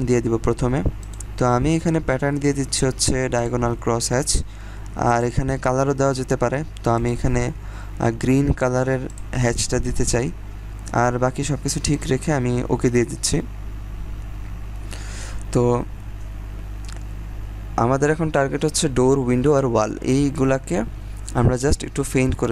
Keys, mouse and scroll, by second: 0.9 click, 3.3 click, 11.8 click.